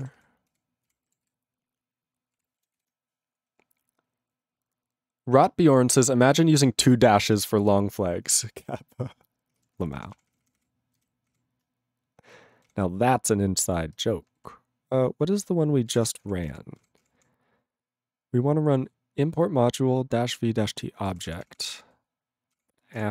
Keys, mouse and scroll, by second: 0.0 ctrl+a, 0.1 ctrl+k, 0.5 ctrl+o, 0.9 ctrl+k, 1.4 ctrl+s, 2.3 ctrl+e, 2.7 ctrl+s, 7.0 ctrl+s.